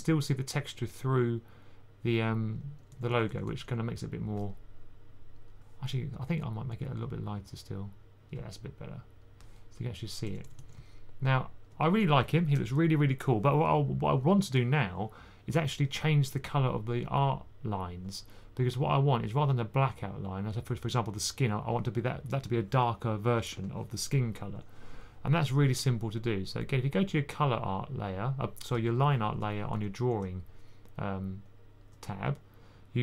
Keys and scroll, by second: 2.2-3.3 typing, 10.1 typing, 29.6 1, 31.7 1.